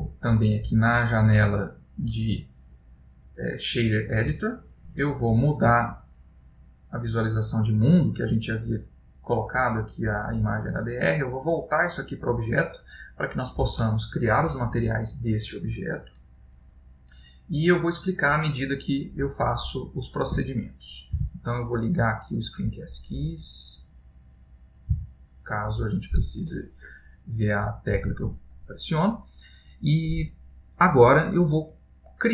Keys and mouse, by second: 25.1 n.